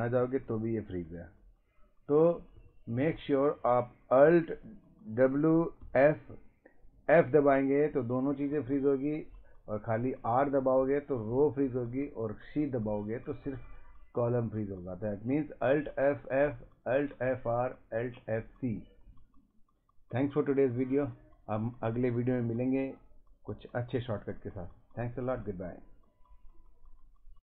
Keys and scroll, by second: 0.2 Left, 2.1 Up, 2.2 Right, 2.6 Up, 2.9 Down, 3.1 Up, 5.2 alt+w, 5.8 f.